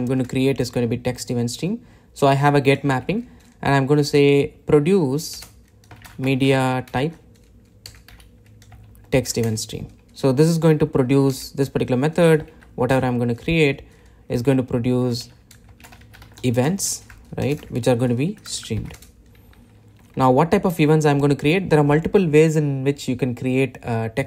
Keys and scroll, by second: 5.7 Return.